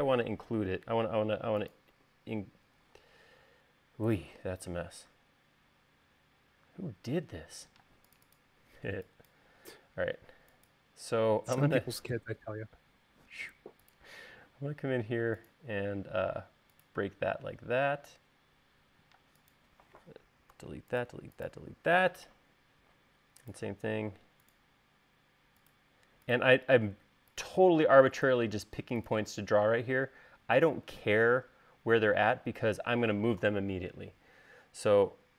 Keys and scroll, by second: 2.4 u, 7.4 e, 8.5 space, 20.0 space, 21.4 BackSpace, 21.9 BackSpace, 22.3 BackSpace.